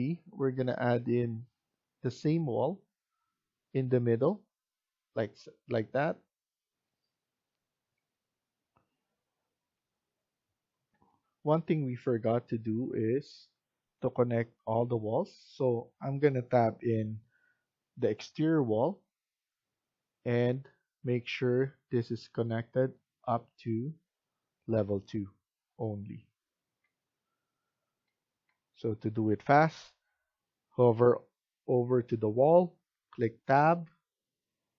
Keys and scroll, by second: 9.7 Escape, 10.8 F1, 14.7 Tab, 28.3 Escape, 32.8 Tab.